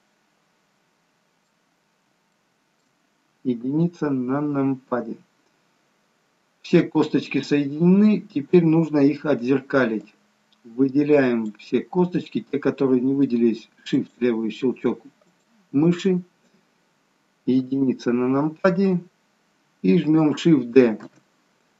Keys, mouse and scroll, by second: 2.4 shift+middle click, 2.4-2.9 scroll down 1, 3.6 KP_1, 10.0 click, 14.0 shift+click, 15.2 shift+click, 17.7 KP_1, 21.1 shift+d.